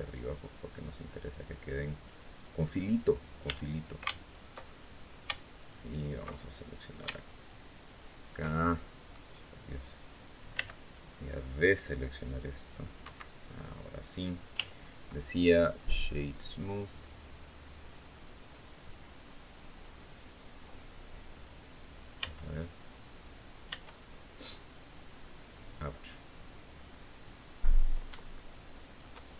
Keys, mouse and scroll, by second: 1.7 click, 2.4-2.7 scroll up 1, 3.2 a, 3.9 alt+shift+right click, 4.3-4.8 alt+shift+scroll up 1, 5.3 alt+shift+right click, 5.7 alt+shift+right click, 6.3 alt+shift+right click, 6.9 alt+shift+right click, 7.6 alt+shift+right click, 8.3-8.8 alt+shift+scroll down 4, 10.3 c, 10.8-12.7 drag, 12.8 Escape, 13.2 scroll up 1, 13.7 scroll down 1, 14.3 w, 15.5 click, 21.9 Tab, 23.4 Tab, 26.6-27.6 scroll up 3, 28.0 shift+middle click.